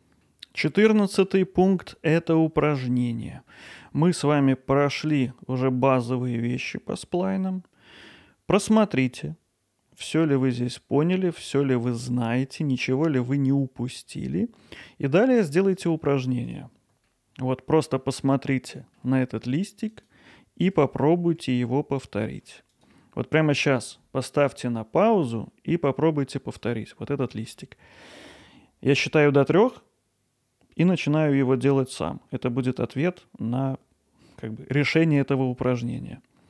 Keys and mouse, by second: 0.2-0.7 middle drag, 1.9-2.6 ctrl+alt+middle drag, 2.8 alt+middle click, 3.5 middle drag, 6.8-8.1 middle drag, 11.5 middle drag, 15.1-15.9 middle drag, 17.1-18.9 alt+middle drag, 21.6 alt+middle click, 27.5-28.5 alt+middle drag.